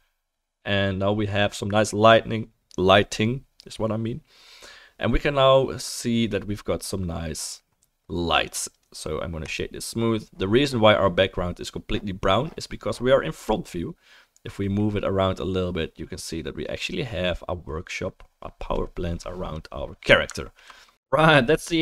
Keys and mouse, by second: 0.0-8.0 drag, 0.0-8.5 middle drag, 0.0-8.0 right drag, 8.5 right click, 9.5 middle click, 9.7-14.7 right drag, 14.7-16.8 middle drag, 16.8-18.7 right drag, 18.7-20.0 drag, 20.2-21.8 alt+drag.